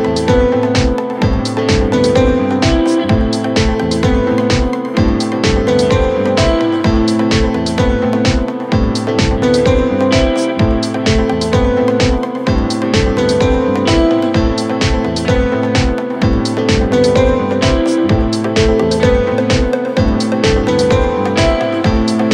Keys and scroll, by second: 5.3 Escape, 13.8 F9.